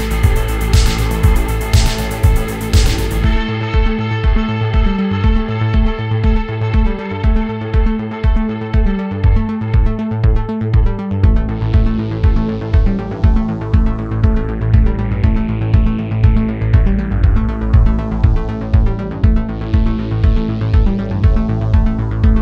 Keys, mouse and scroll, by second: 0.0 f, 0.1 click, 0.3 scroll down 2, 0.4 shift+middle click, 0.5 scroll up 1, 0.5 click, 0.6 f, 0.8 scroll down 1, 0.8-2.0 shift+middle drag, 2.0 f, 2.1 middle click, 2.1 x, 2.5 middle click, 2.7 click, 3.3 shift+middle click, 3.5 scroll up 1, 3.7 click, 3.9 ctrl+z, 4.0-5.0 drag, 5.0 scroll down 6, 5.2-5.5 scroll up 3, 5.3 shift+middle click, 5.5 click, 5.8 middle click, 6.0 click, 6.3 scroll down 3, 6.3 middle click, 6.7 scroll up 3, 6.9 click, 7.0 scroll down 1, 7.1 middle click, 7.1 scroll up 1, 7.2 click, 7.4 scroll down 1, 7.4 shift+middle click, 7.8 f, 7.9 middle click, 8.1 click, 8.7 scroll down 2, 8.8 shift+middle click, 8.9 scroll up 2, 9.1 click, 9.4 middle click, 9.6 click, 9.7-10.3 scroll down 2, 9.7 shift+middle click, 10.3 shift+middle click, 10.6 scroll up 3, 10.7 shift+middle click, 10.8 shift+middle click, 10.9 f, 11.0 middle click, 11.1 scroll down 3, 11.3 scroll up 2, 11.4 middle click, 11.6 f, 11.8 shift+middle click, 12.1 shift+middle click, 12.8 click, 13.1 middle click, 13.4 click, 13.9 f, 14.0 x, 14.0 middle click, 14.1 f, 14.2 click, 14.5 middle click, 14.6 click, 14.9 shift+middle click, 15.2 click, 15.4 middle click, 15.5 click, 15.8 scroll down 3, 15.8 shift+middle click, 15.9 scroll up 3, 16.0 shift+middle click, 16.1 click, 16.7 middle click, 17.2 scroll up 2, 17.3 middle click, 17.5 f, 17.6 click, 18.0 middle click, 18.2 click, 18.4 middle click, 18.5 scroll up 1, 18.6 click, 18.9 scroll down 1, 19.0 middle click, 19.1-19.8 scroll up 2, 19.4 shift+middle click, 20.1 click, 20.2 middle click, 20.6 click, 21.1 click, 21.5 click.